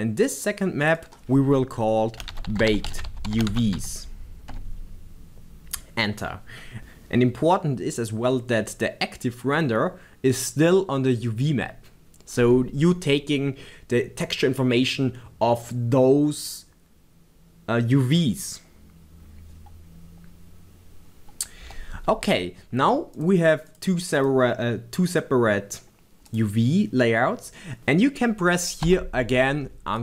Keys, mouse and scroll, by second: 4.6 t, 23.2 click.